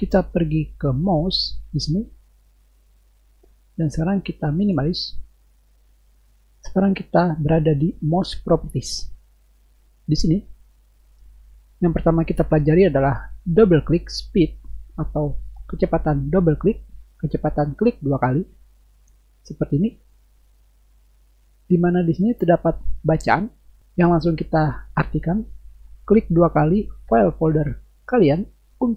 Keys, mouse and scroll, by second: 6.7-7.2 drag, 19.9 click, 20.0 click.